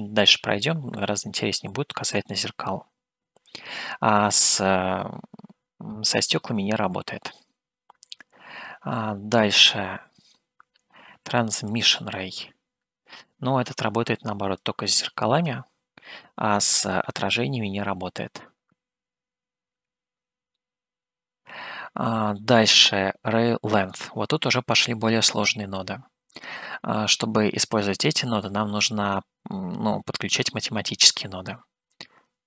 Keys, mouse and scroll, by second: 6.3-9.6 middle drag, 9.8 middle click, 11.9-14.9 drag, 16.6-20.7 middle drag, 24.2-26.5 drag, 28.2-28.9 scroll down 2, 29.0-30.2 middle drag, 31.0-32.4 drag.